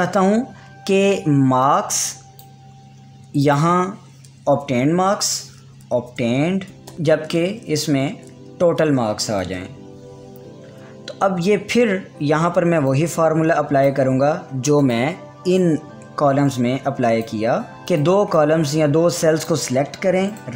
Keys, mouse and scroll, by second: 2.2-4.0 drag, 5.1-7.4 typing, 8.5-10.6 typing, 12.0-13.4 scroll down 1, 13.4-20.5 drag.